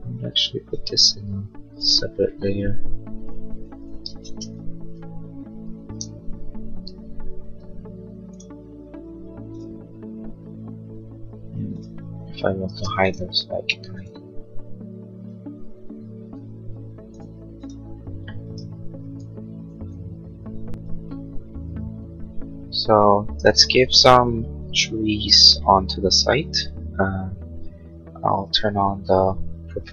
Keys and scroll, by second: 6.8 Return, 12.7 space, 19.7 ctrl+s.